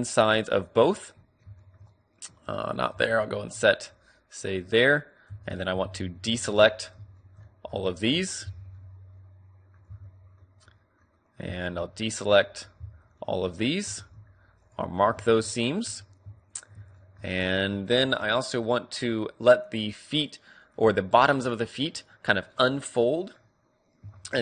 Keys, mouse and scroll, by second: 0.4-1.6 right drag, 1.6-2.6 middle drag, 2.5 ctrl+z, 3.0-4.7 middle drag, 5.0 middle click, 5.3 z, 5.7 b, 6.5 KP_3, 7.1-8.6 middle drag, 8.4 b, 9.9 z, 10.6-12.3 middle drag, 11.5 b, 12.5 click, 12.8 middle click, 13.2-16.5 middle drag, 13.9 ctrl+e, 15.9 a, 16.5-18.1 right drag, 17.0-19.9 middle drag, 17.3 a, 20.7-23.2 middle drag, 24.2 middle click, 24.3-24.4 drag.